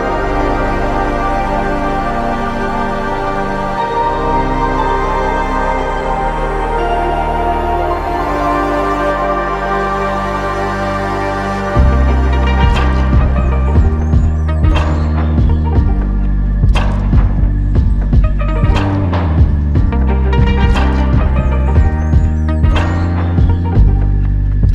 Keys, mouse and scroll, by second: 0.0 alt+click, 1.2 f, 23.7 alt+click.